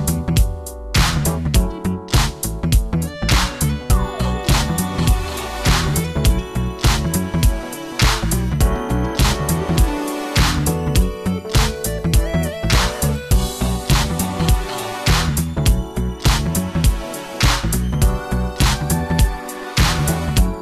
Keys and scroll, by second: 1.3 alt+i, 1.7 alt+a, 2.7 alt+c, 5.1 Return, 9.4 Return.